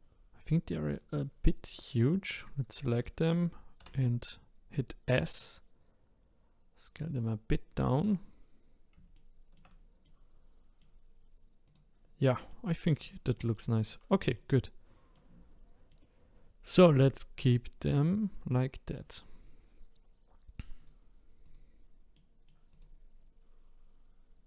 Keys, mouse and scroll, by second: 1.0-3.8 drag, 3.8 s, 9.1-11.2 shift+middle drag, 11.2 scroll down 1, 11.6 click, 12.2 middle click, 12.6-13.0 scroll down 5, 13.0-16.1 shift+middle drag, 16.1-16.9 scroll up 2, 20.8 click, 21.4 click, 22.1 middle click, 22.7 click, 23.2 scroll down 1.